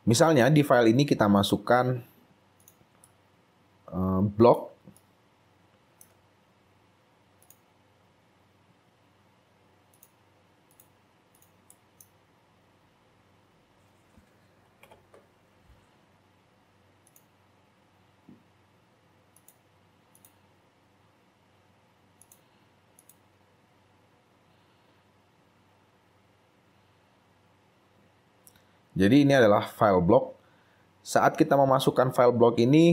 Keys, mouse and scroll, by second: 3.2 right click, 4.9 right click, 5.1 shift+right click, 11.9 right click, 14.8 right click, 15.0 ctrl+i, 23.7 scroll up 3, 27.4-28.1 scroll down 3, 28.5 scroll down 1, 28.6 scroll up 3, 29.5 scroll up 2.